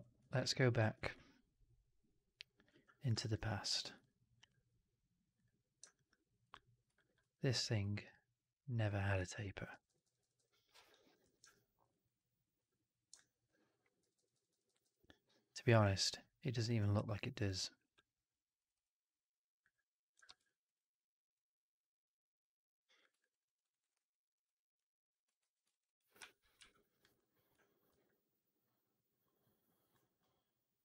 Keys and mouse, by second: 0.5 ctrl+z, 3.2 ctrl+alt+z, 3.2 click, 4.0 drag, 5.8 drag, 6.3 click, 6.8 alt+drag, 7.1 1, 7.9-9.6 drag, 9.6 Up, 9.7-10.8 Up, 11.1 shift+x, 11.4 alt+click, 11.8 alt+right click, 12.0 alt+click, 13.3 alt+click, 13.9-14.7 Up, 15.6 Delete, 16.8 2, 17.3 click, 17.4 click, 18.5 click, 18.6 click, 19.5 click, 20.1 shift+x, 20.3 alt+click, 21.2-22.9 drag, 23.1 alt+click, 23.5 alt+right click, 23.7 alt+right click, 23.8 alt+click, 25.3 ctrl+f, 25.6 alt+right click, 25.7 alt+click, 26.1 4, 26.5 2, 26.8 click, 27.8 alt+b.